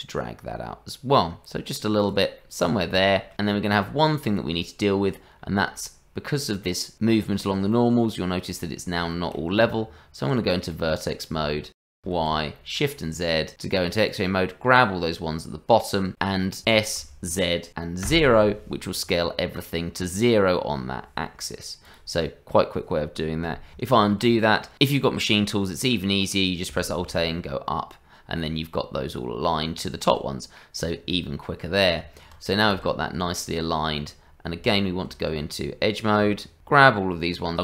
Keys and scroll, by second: 9.6 Tab, 12.2 shift+z, 16.6 s, 23.9 ctrl+z, 26.8 alt+a, 32.0 Tab, 32.7 shift+z, 36.2 Tab.